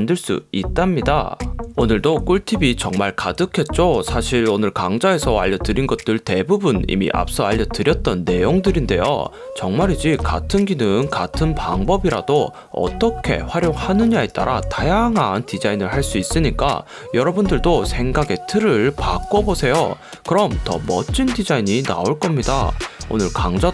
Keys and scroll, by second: 1.9 super+=, 3.0 Tab, 4.0 alt+super+0, 5.7 super+=, 9.4 Tab, 10.3 super+0, 11.1 alt+super+0.